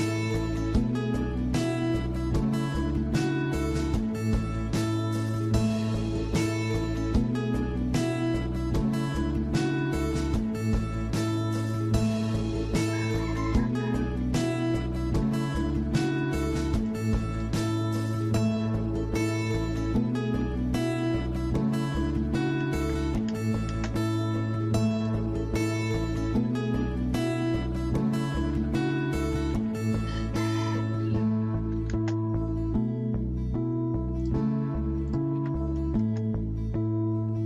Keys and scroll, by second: 16.2 alt+Tab, 18.2 Escape, 22.3-23.6 typing, 28.3-29.9 typing, 31.5 typing, 34.8-35.9 typing.